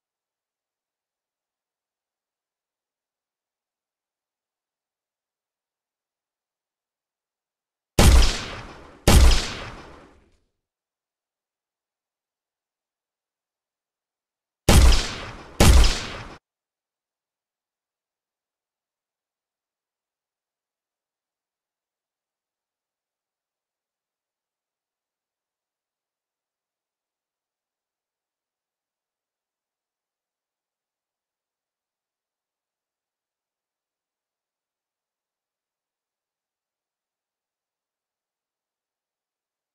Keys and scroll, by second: 3.4 w, 5.6 d, 6.4 s, 12.8 w, 16.3 Escape.